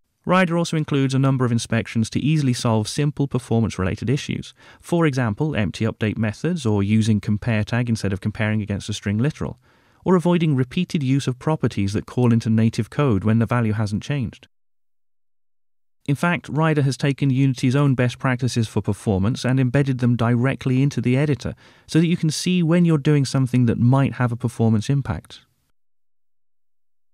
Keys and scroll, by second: 0.9 alt+Return, 7.0 alt+Return, 11.7 alt+Return, 16.3 alt+Return, 22.6 alt+Return.